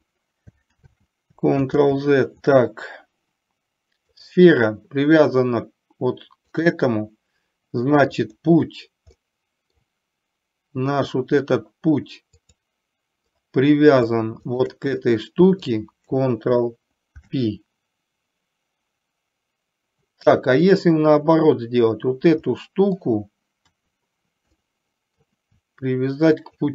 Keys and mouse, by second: 0.8 ctrl+z, 4.3 click, 6.7 click, 8.2 click, 9.2-9.8 middle drag, 12.5 click, 14.6 shift+click, 15.0-15.7 middle drag, 17.2 ctrl+p, 20.8 click, 22.6 middle click, 23.7 KP_4, 24.7 middle click, 26.5 shift+click.